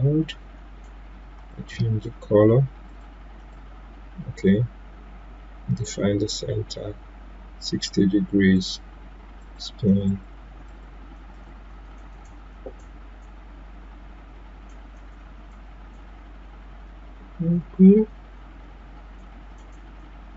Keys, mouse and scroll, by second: 8.5 click, 10.7 click.